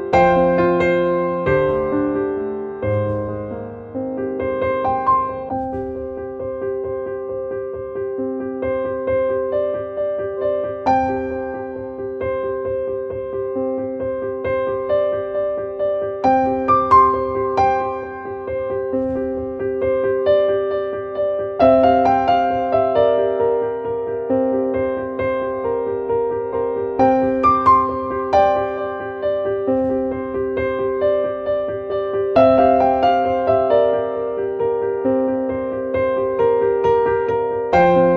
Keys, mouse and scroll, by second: 4.4 right click, 6.0-9.7 drag, 11.6-13.0 drag, 16.5 click, 18.0-19.4 drag, 19.9 click, 20.4 click, 21.2 click, 24.2 click, 26.3 click, 31.6 click, 35.3 click, 36.3-37.8 drag.